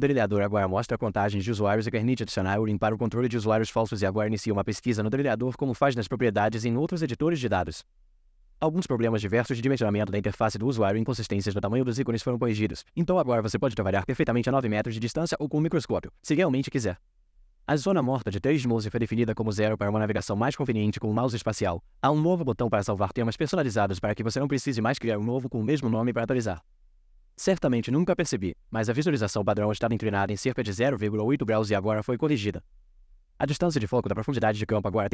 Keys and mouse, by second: 10.9-14.9 right drag, 34.7-35.1 drag.